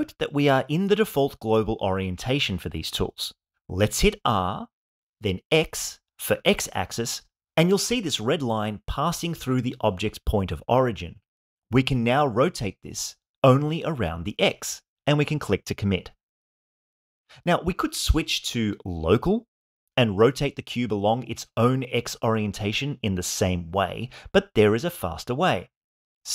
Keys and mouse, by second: 0.6-3.7 drag, 4.1 r, 5.5 x, 16.1 click, 17.8-20.2 drag, 21.2 r, 22.1 x.